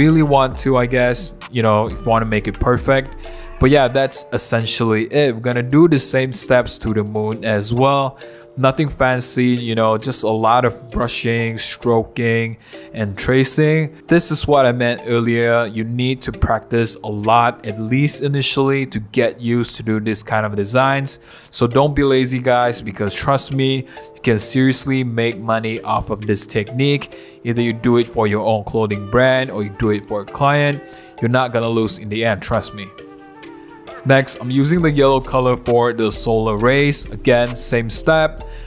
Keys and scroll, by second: 0.7-1.9 typing, 2.0 super+z, 3.4-5.6 typing, 8.1 ], 8.5 [, 8.6 [, 9.9-12.5 typing, 13.9-23.0 typing, 24.8-27.3 typing, 28.1 super+z, 28.3 super+z, 33.8 v, 34.1 [, 35.4 [, 35.5 ], 38.5 super+z.